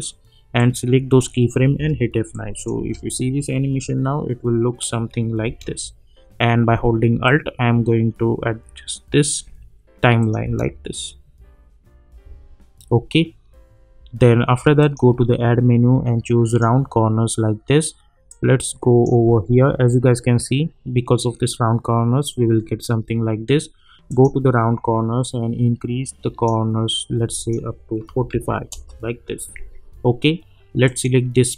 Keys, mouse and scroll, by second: 1.7 F9, 2.6-2.9 click, 2.8 space, 5.4 space, 7.2-9.4 alt+drag, 10.4 space, 14.8-19.2 drag, 28.7 Return, 30.8-31.5 drag.